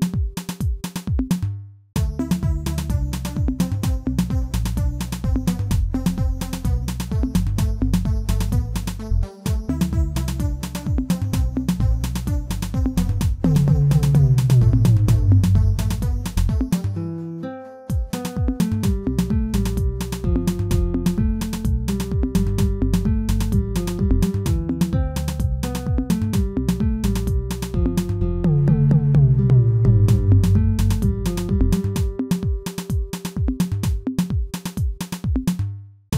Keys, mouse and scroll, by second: 0.7-1.0 scroll up 1, 1.0 shift+middle click, 1.6 s, 7.9 alt+click, 8.3 shift+middle click, 8.7-9.4 scroll up 3, 9.4 shift+middle click, 10.1 e, 12.4 e, 15.3 ctrl+r, 19.1 ctrl+r, 22.2 shift+z, 22.5-23.6 shift+middle drag, 23.6 alt+click, 25.0-27.4 shift+middle drag, 27.4 alt+click, 29.0 middle click, 29.8 scroll down 2, 30.3 s, 31.9-33.7 middle drag, 33.7 alt+click.